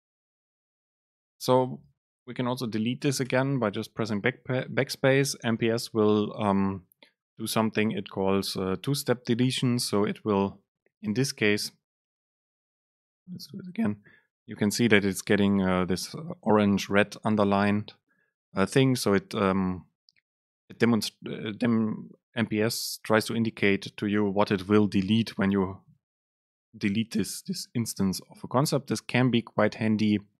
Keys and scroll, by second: 0.6 super+space, 2.8 Right, 3.3 BackSpace, 13.6 BackSpace.